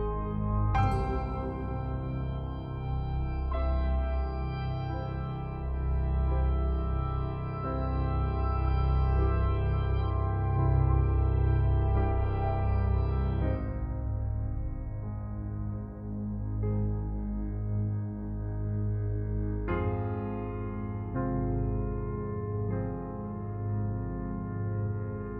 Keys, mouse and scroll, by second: 0.9 click, 3.8 click, 7.1 ctrl+alt+shift+e, 9.6 click, 17.1 click, 20.6 click, 24.9-25.3 scroll up 1.